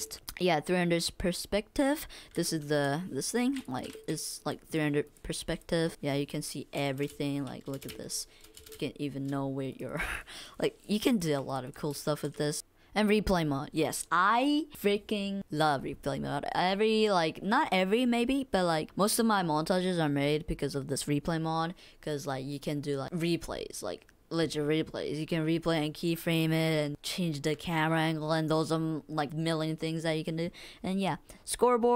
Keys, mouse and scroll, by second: 0.0 space, 3.4-4.1 typing, 3.6 click, 3.6 right click, 4.4 click, 5.0 click, 5.5 click, 6.0 click, 7.0 w, 7.8 click, 8.2 click, 8.2 click, 8.3 space, 9.7 click, 10.2 click, 11.0 click, 11.5 click.